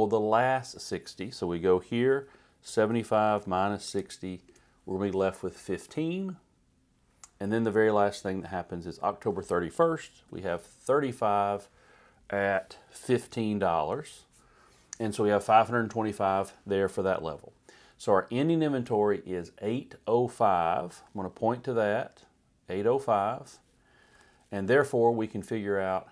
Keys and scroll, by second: 1.9-4.5 typing, 10.0 3, 11.1 Right, 12.9-13.7 typing, 13.9 Right, 21.0 =, 24.1 Return.